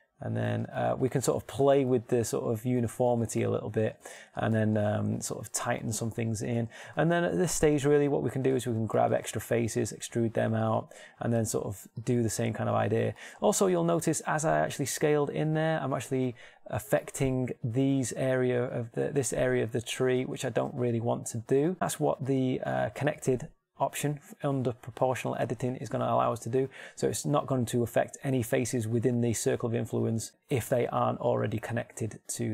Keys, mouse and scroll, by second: 7.4 ctrl+Tab, 10.3 e, 11.5 s, 14.2-15.7 middle drag, 15.5 s, 17.5-19.3 drag, 20.6 ctrl+z, 21.1 ctrl+z, 26.4-27.8 middle drag, 27.9-30.7 middle drag, 30.3 s, 31.8-32.5 drag.